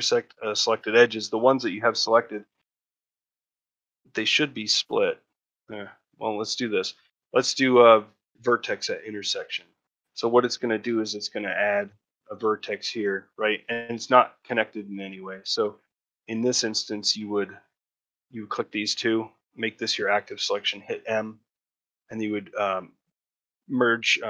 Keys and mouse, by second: 2.1 click, 3.9 middle click, 4.9 ctrl+middle click, 6.7-8.3 right drag, 9.1 middle click, 11.4 1, 12.0 click.